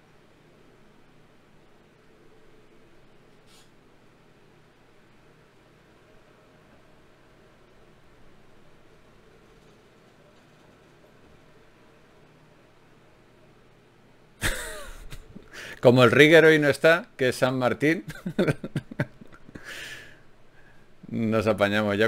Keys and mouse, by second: 5.3 shift+q, 11.3-14.7 middle drag, 21.1 ctrl+r.